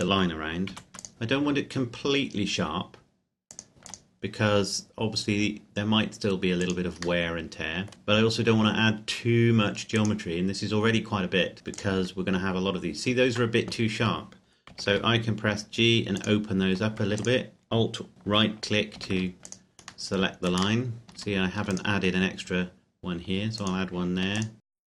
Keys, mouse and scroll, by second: 0.0 click, 0.7 ctrl+r, 1.0 click, 3.5 click, 3.7 ctrl+r, 3.9 ctrl+click, 7.2 middle click, 7.9 ctrl+click, 10.2 click, 11.6 Tab, 12.0 click, 13.5 Tab, 14.8 g, 15.1 g, 16.3 click, 17.2 alt+right click, 19.0 g, 19.2 g, 19.5 click, 20.9 middle click, 21.2 ctrl+r, 21.8 click, 24.4 alt+right click, 24.6 g.